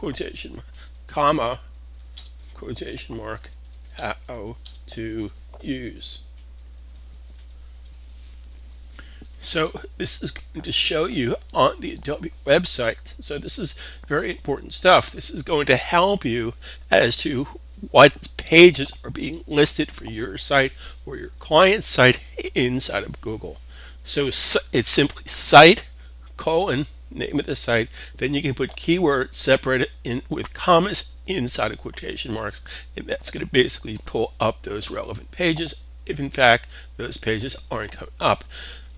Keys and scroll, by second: 0.4 space, 1.6-6.0 typing.